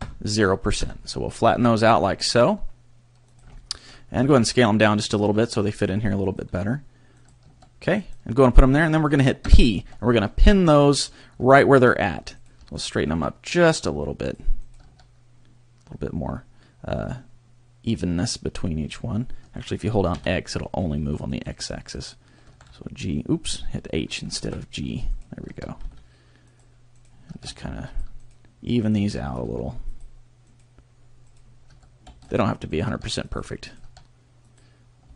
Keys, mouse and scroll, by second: 2.0 g, 3.4 click, 3.6 shift+middle click, 4.1 s, 5.1 click, 5.2 g, 6.3 click, 6.5 s, 7.2 click, 7.4 g, 8.1 click, 9.4 p, 11.6 shift+middle click, 12.4 right click, 12.6 g, 14.3 click, 14.6 right click, 14.8 g, 21.4 click, 21.9 right click, 22.4 h, 22.7 x, 24.4 ctrl+z, 25.1 right click, 25.4 g, 26.6 click, 26.9 right click, 27.2 g, 28.0 click, 28.2 right click, 28.8 right click, 29.0 g, 30.0 click, 30.5 right click, 31.2 right click, 31.6 g, 32.3 click, 32.7 right click, 32.8 g, 33.4 click, 33.6 right click, 33.8 g, 34.6 click, 35.0 x.